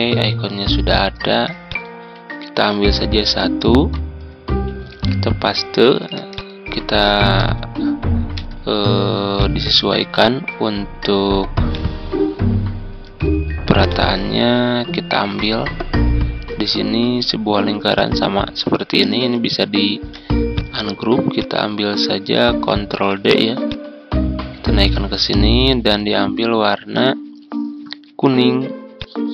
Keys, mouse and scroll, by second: 1.6 click, 3.6 Tab, 6.3 shift+click, 7.3 shift+b, 9.3-12.9 drag, 13.8-15.7 drag, 19.4 ctrl+u, 19.9 ctrl+u, 19.9 ctrl+u, 20.5 click, 22.8 ctrl+d, 23.6-25.7 drag, 26.7-29.3 ctrl+drag.